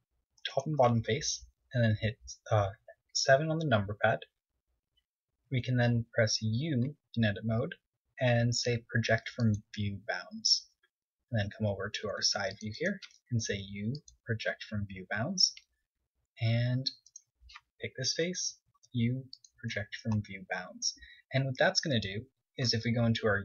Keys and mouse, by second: 0.3-3.9 right drag, 3.5 KP_7, 6.1 z, 7.1 u, 12.2 KP_3, 13.5 a, 13.7 c, 14.4 click, 15.0 u, 17.2 KP_3, 18.0 KP_1, 18.6-20.4 middle drag, 20.3 u, 21.7-23.4 middle drag.